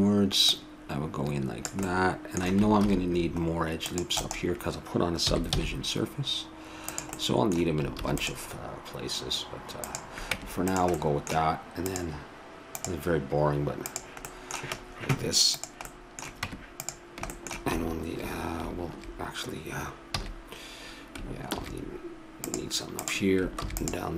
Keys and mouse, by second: 0.3 r, 0.5-2.4 drag, 1.8 middle click, 2.8 ctrl+r, 5.2 s, 7.2-8.9 middle drag, 7.9 ctrl+r, 10.3 Tab, 11.1 middle click, 11.9 click, 13.9-16.4 drag, 16.4 Tab, 20.2 a, 21.5 ctrl+r, 23.6 ctrl+r.